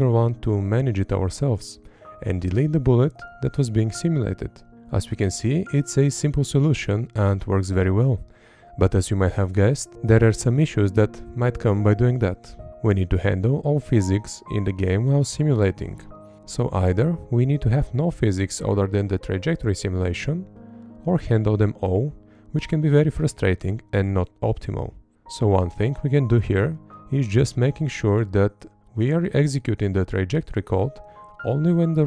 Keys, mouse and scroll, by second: 0.1 Up, 0.4 Left, 0.9 Up, 1.4 Left, 1.7 Up, 2.2 Right, 2.6 Up, 2.9 Left, 3.5 Right, 4.0 Up.